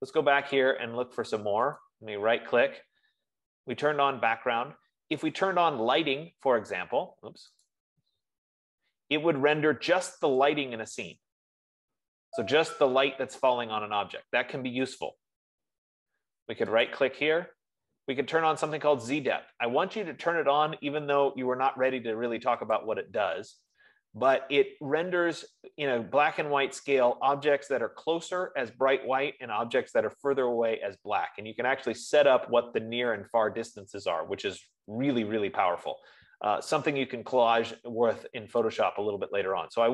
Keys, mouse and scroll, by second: 1.0-2.2 drag, 2.2-5.1 right drag, 6.0 F15, 8.1 right click, 11.1 click, 14.1-15.8 drag, 17.4-22.3 right drag, 23.3-28.2 drag, 39.6-39.9 right drag.